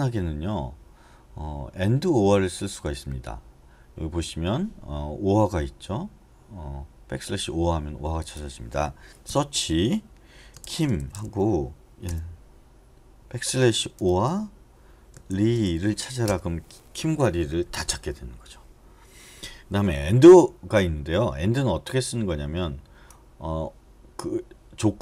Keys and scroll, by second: 9.3 /, 10.4-12.0 typing, 14.0 |, 15.3-15.6 typing, 16.2 Return.